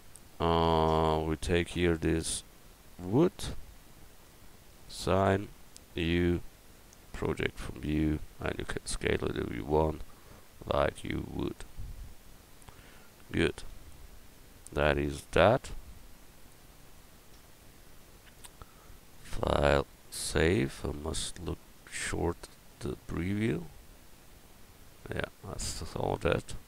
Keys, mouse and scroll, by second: 6.0 u, 8.9 s, 12.3 Tab, 13.6 a, 16.8-19.1 middle drag, 19.1-21.2 drag, 21.4 click, 23.0-24.1 drag.